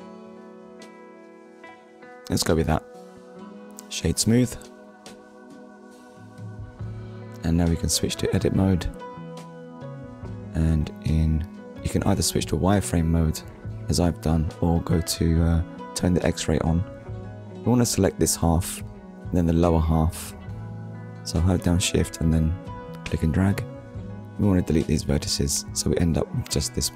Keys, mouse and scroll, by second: 0.5 middle click, 1.0 click, 1.7 middle click, 2.3 click, 3.4 click, 4.7 KP_1, 6.7 click, 7.4 click, 8.3 scroll up 1, 8.9 shift+middle click, 10.5 click, 12.6 click, 15.0 click, 15.8 click, 19.9 shift+click, 23.6 Delete, 24.8 click.